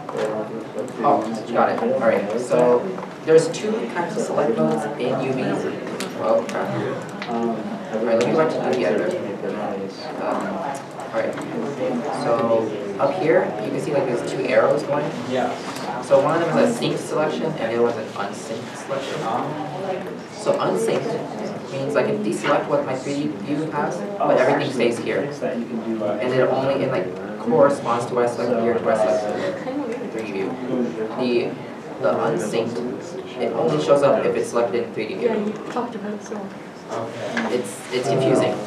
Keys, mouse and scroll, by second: 9.5 Tab, 10.0 a, 10.4 Tab, 10.7 a, 20.1 a, 20.1-20.6 scroll up 1, 21.5 alt+a, 23.7 shift+middle click, 26.8 shift+middle click, 34.6 middle click, 34.7 a.